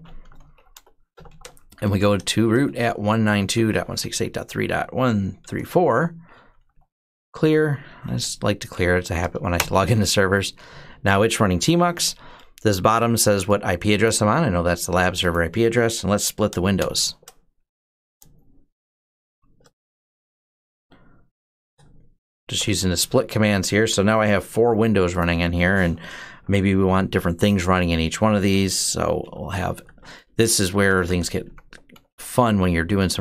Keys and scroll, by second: 0.0-8.3 typing, 7.2 Return, 9.4 Return, 16.1 ctrl+b, 16.6 typing, 17.6 ctrl+b, 19.0 %, 20.0 ctrl+b, 20.2 Up, 21.4 ctrl+b, 22.4 %, 28.8-33.2 typing, 29.2 Tab, 32.4 Tab.